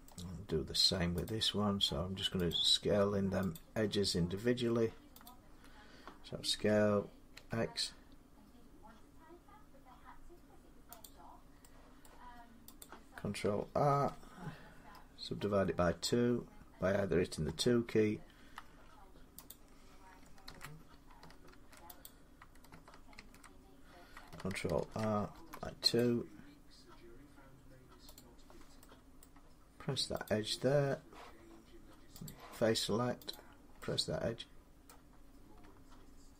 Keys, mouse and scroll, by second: 1.1 click, 2.3 shift+click, 3.4 click, 5.1 shift+click, 6.4-7.2 typing, 10.2 x, 10.9 click, 11.9 middle click, 12.6 click, 13.7 ctrl+r, 14.5-14.8 scroll up 2, 15.2-15.6 scroll down 2, 15.6 scroll up 2, 16.1-17.3 scroll, 17.3-18.2 typing, 19.3 click, 20.3 ctrl+z, 20.4 scroll down 1, 20.4 2, 21.3 ctrl+z, 21.9 click, 23.0 ctrl+z, 24.6 ctrl+r, 25.2 2, 25.8 click, 28.0 right click, 29.0 middle click, 30.2 click, 32.1 click, 33.2 click, 34.7 middle click.